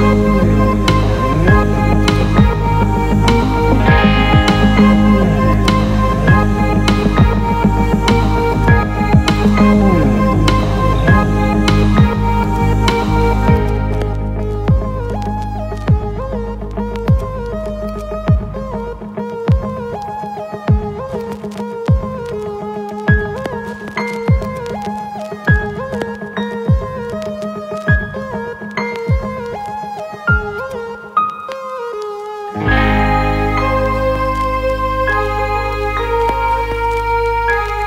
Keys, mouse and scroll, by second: 2.1-3.5 alt+shift+middle drag, 5.4 alt+middle click, 7.5 KP_0, 8.5 ctrl+alt+middle click, 10.0 KP_0, 12.5 click, 13.5 click, 15.8 click, 17.3 click, 21.2-23.7 alt+middle drag, 24.5-26.7 alt+shift+middle drag, 28.4 z, 30.5-30.9 drag, 34.4 shift+a.